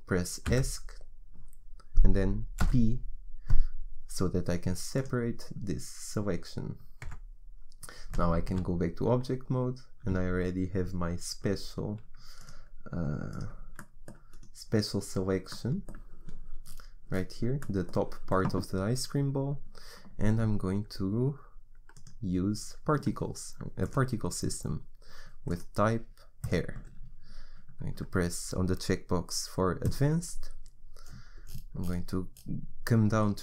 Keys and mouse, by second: 2.8 p, 7.2 Tab, 12.4 click, 15.8-21.9 middle drag.